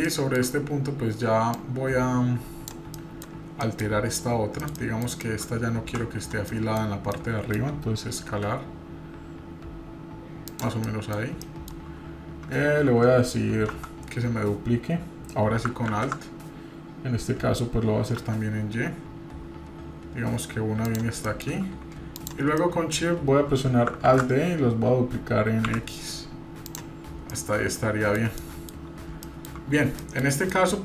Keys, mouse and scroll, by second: 0.0-0.4 shift+middle drag, 0.5-1.5 scroll up 2, 1.5-2.7 drag, 2.9 middle drag, 3.2-3.6 scroll down 1, 3.6 middle drag, 4.2 scroll up 2, 4.7-5.4 shift+middle drag, 5.7 Tab, 6.5 middle click, 7.1 middle click, 8.3 3, 10.8 middle click, 11.1 scroll down 1, 11.4 shift+middle click, 13.7 Tab, 15.9 alt+d, 21.2 middle click, 22.1-22.5 shift+drag, 22.6 middle click, 24.1 alt+d, 27.1 scroll down 2, 27.3-28.2 middle drag, 28.4 middle click, 28.8 scroll up 1, 29.2 shift+middle click, 29.7-30.0 scroll up 2, 30.0 middle click, 30.5-30.8 shift+middle drag.